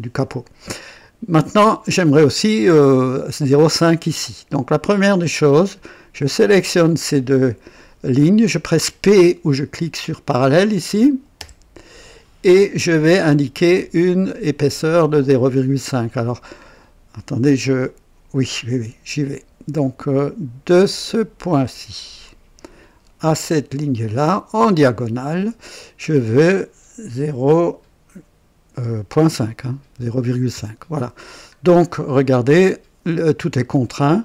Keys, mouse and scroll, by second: 1.3 scroll up 2, 4.8 click, 6.1 click, 11.3 p, 12.5 scroll up 1, 13.0 right click, 22.1 click, 23.6 click, 24.9 click, 27.1 KP_Decimal, 29.8 typing, 30.5 KP_Enter, 31.5-31.8 scroll down 2, 32.2-33.9 right drag, 34.0 scroll up 1.